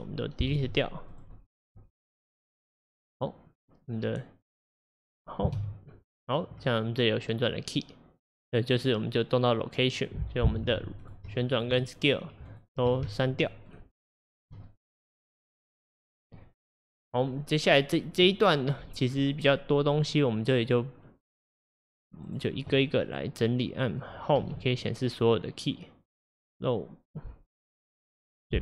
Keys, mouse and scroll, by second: 0.6 Delete, 1.2 click, 1.4 Delete, 1.6 click, 1.8 Delete, 2.1 click, 2.3 Delete, 5.6 Home, 8.8 click, 10.0-10.4 drag, 11.1 drag, 11.6 shift+click, 12.5 shift+click, 13.5 shift+click, 13.7 shift+click, 14.3 shift+click, 15.8 Delete, 20.1 click, 22.3-22.7 drag, 23.1 click, 23.9 middle click, 24.4 Home, 26.2 click.